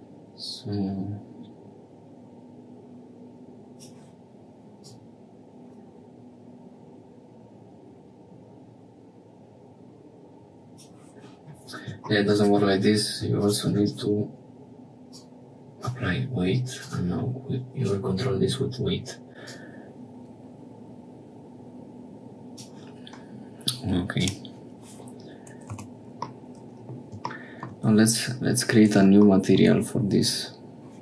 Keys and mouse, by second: 4.7-10.6 drag, 12.0 shift+middle click, 12.3 Tab, 12.7 Tab, 15.0 click, 16.7 click, 19.4-22.6 drag, 24.2 click, 25.7 Tab, 26.3 middle click, 27.3 shift+click, 29.3 shift+click.